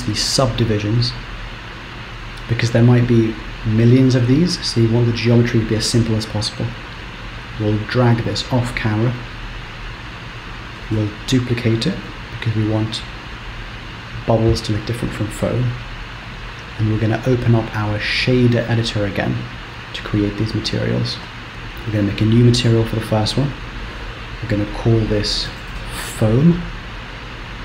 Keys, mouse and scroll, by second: 0.3 click, 7.0 g, 10.8 shift+d, 16.2 click, 18.1 click, 18.9 click, 21.6 click, 23.0 click, 27.0-27.6 scroll up 7.